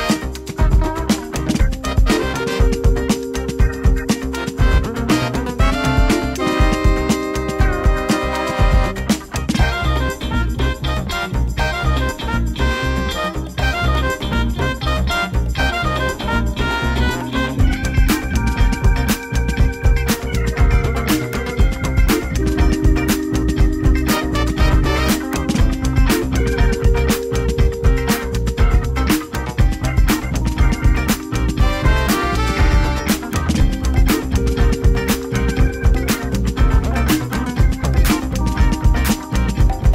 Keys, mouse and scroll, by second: 0.0 l, 0.7 ctrl+z, 1.6 l, 3.0 l, 4.2 ctrl+z, 5.4 l, 6.3 ctrl+z, 7.6 l, 9.2-10.0 typing, 10.0 ctrl+z, 10.3 click, 11.8 l, 12.2 l, 14.1 ctrl+v, 15.2-16.2 drag, 16.2-17.2 middle drag, 18.0 click, 18.9 g, 19.2 z, 20.3 click, 21.1 click, 22.0 Tab, 22.8-24.1 drag, 28.2-29.3 drag, 29.9-30.4 drag, 30.2-30.9 typing, 31.2 click, 31.3-32.7 ctrl+drag, 33.2 click, 34.6 click, 35.5 click, 36.3 middle click, 37.5 click.